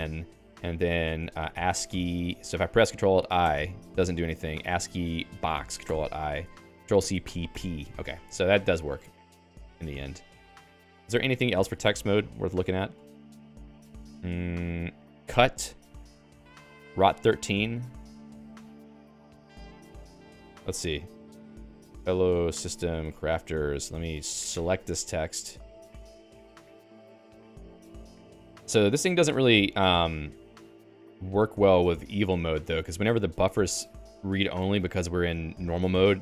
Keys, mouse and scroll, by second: 0.0 Return, 0.2-2.3 typing, 3.6 ctrl+alt+i, 4.4-5.9 typing, 6.0 ctrl+alt+i, 8.5 ctrl+g, 8.9-10.9 typing, 11.0 Escape, 13.0 ctrl+j, 13.3 ctrl+j, 13.5 Return, 14.1-17.0 typing, 20.8 Return, 21.1-24.2 typing, 24.5 Escape, 25.4 i, 26.0 Escape, 26.2 l, 26.5 i, 27.4 Right, 28.6 Left, 29.5 Delete, 29.7 Delete, 30.2-31.8 Left, 32.5 Escape, 32.7 j, 33.6 i.